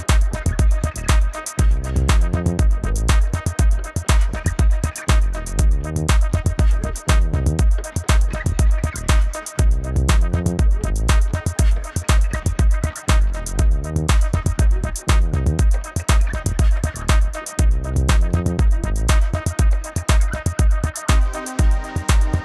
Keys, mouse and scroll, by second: 0.2 =, 0.4 click, 0.5 Right, 0.6 Up, 0.8 Right, 1.0 Left, 1.1 click, 1.3 space, 1.3 click, 1.5 a, 1.7 click, 1.9 Down, 2.2 click, 2.5 Down, 2.8 v, 2.9 click, 3.1 Down, 3.6 click, 3.8 Up, 4.1 click, 4.3 v, 4.6 click, 5.6 Down, 6.7 click, 7.1 shift+click, 7.8 click, 8.5 Down, 9.6 click, 9.8 ctrl+-, 9.9 space, 10.0 click, 10.1 ctrl+=, 10.3 click, 10.5 Up, 10.8 click, 11.0 Up, 11.1 click, 11.2 ctrl+-, 11.4 click, 11.6 space, 11.8 click, 11.9 space, 12.3 ctrl+=, 12.6 click, 12.6 Right, 12.9 click, 15.2 Right, 15.3 click, 16.6 Right, 16.9 click, 17.0 Right, 17.3 click, 18.9 Right, 19.6 click, 20.2 Down, 20.8 click, 21.1 ctrl+-, 21.2 click.